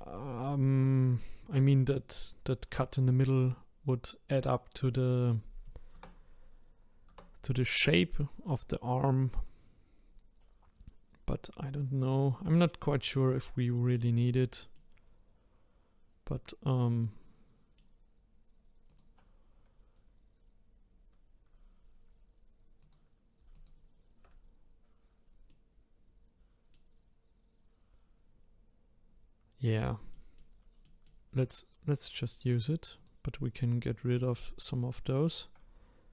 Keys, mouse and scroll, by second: 4.0-4.5 scroll down 1, 4.5-5.9 middle drag, 5.9 Tab, 7.1 Tab, 8.0-9.2 middle drag, 9.2 click, 9.7-12.9 scroll up 3, 13.6-14.7 scroll down 2, 14.7-17.8 middle drag, 18.9 click, 20.8 scroll up 1, 21.5-22.1 scroll up 2, 22.8 click, 23.5 alt+click, 25.5-28.6 middle drag, 29.6-30.1 scroll up 1, 30.1-31.4 shift+middle drag, 31.4-32.0 scroll up 2, 32.0-32.8 scroll down 1, 32.8 scroll down 2, 33.0 click, 34.3 shift+click, 35.1 shift+click.